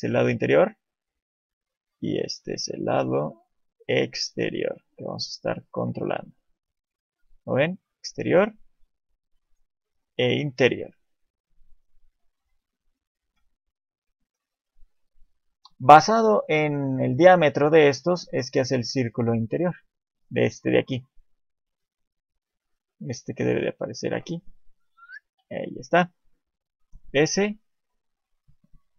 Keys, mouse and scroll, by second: 0.8 click, 0.8 d, 5.7-6.9 d, 6.9 click, 10.4 click, 13.0 alt+middle click, 13.6 middle click, 23.1 click, 25.2 d, 27.1 click, 28.3 click.